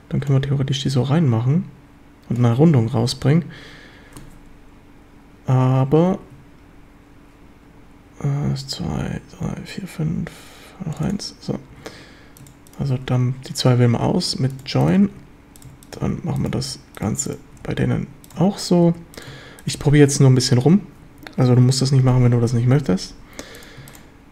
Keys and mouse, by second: 0.4-2.4 drag, 2.8 ctrl+z, 3.1-11.1 middle drag, 6.1 ctrl+r, 11.1 click, 11.2 middle click, 11.7 a, 12.4-12.9 shift+right drag, 14.1 j, 15.1 j, 16.0 j, 17.0 click, 17.6 j, 18.9 j, 19.8 j, 21.1 j, 21.6 a, 23.1 2.